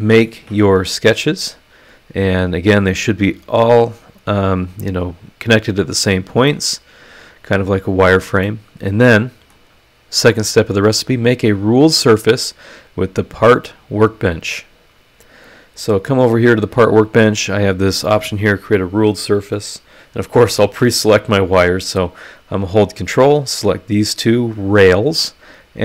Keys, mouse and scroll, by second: 6.5-8.3 middle drag, 8.4 scroll up 2, 8.4-9.7 middle drag, 8.4 click, 12.4 click, 13.9 click, 18.7 click, 20.1 click, 21.3 click, 22.9 ctrl+click, 23.2 ctrl+middle click, 25.7 click.